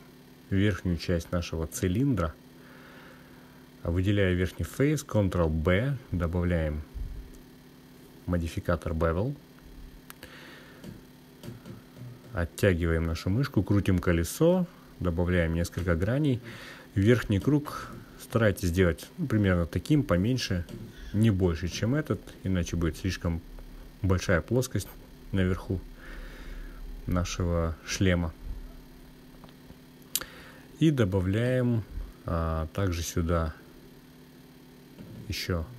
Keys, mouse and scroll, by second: 0.8-2.7 drag, 3.4 click, 5.0-6.3 drag, 10.9 ctrl+b, 16.0-17.0 scroll up 2, 20.5-22.1 scroll up 1, 30.5 click, 32.5 click, 35.4 ctrl+r.